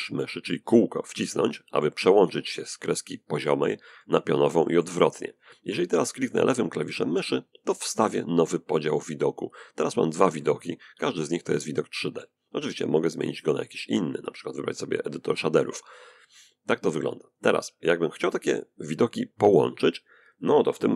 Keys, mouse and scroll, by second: 0.7 middle click, 3.1 middle click, 3.8 middle click, 6.6 click, 9.5-11.7 middle drag, 12.2 click, 12.9 click, 15.4 click, 16.5 click.